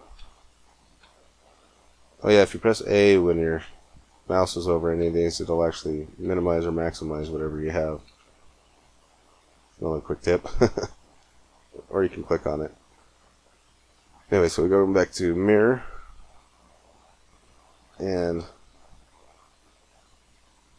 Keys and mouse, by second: 0.0 a, 0.8 a, 2.3 a, 3.8-6.0 middle drag, 4.8 a, 6.0 a, 7.0 a, 7.9 a, 9.3-11.0 middle drag, 17.7 a.